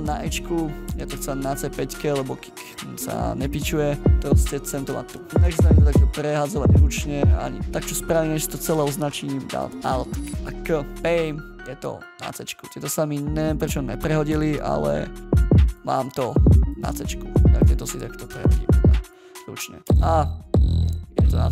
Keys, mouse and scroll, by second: 7.6 shift+Up, 15.2 right click.